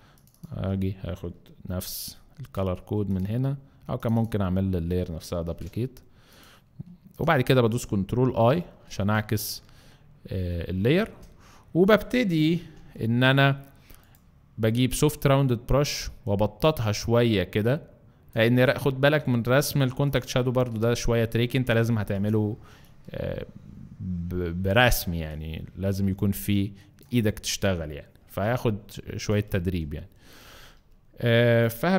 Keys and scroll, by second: 2.4 ctrl+c, 5.5 ctrl+v, 8.7 ctrl+i, 11.0 alt+space, 12.6 b, 28.3 z, 29.3 space, 30.2 space, 30.8 z.